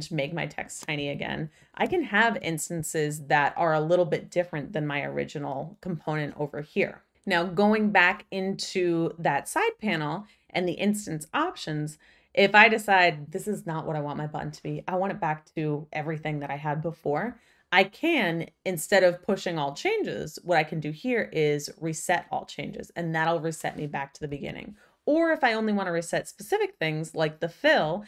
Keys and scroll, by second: 0.9 shift+Down, 1.5 shift+Up, 24.2 super+z.